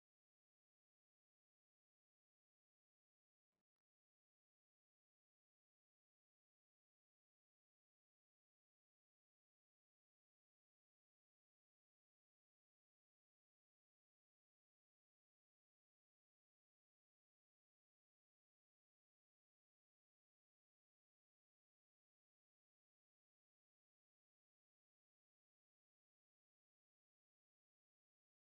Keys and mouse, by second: 0.0 Escape, 1.8 Tab, 1.8-5.7 middle drag, 5.7 right click, 6.6 middle click, 6.7 ctrl+r, 10.4-11.7 drag, 10.4-12.3 right drag, 12.4 s, 16.5 middle click, 24.0 KP_0, 25.7-27.1 drag.